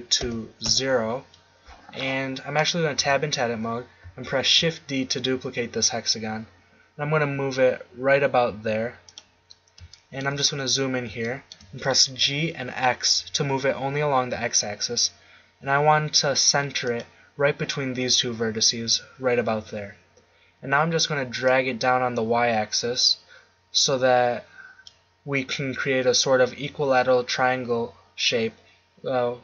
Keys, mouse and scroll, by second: 3.0 Tab, 4.4 shift+d, 9.2 click, 9.5-11.3 drag, 12.1 g, 17.0-20.1 drag, 20.1 middle click, 21.4-23.3 drag.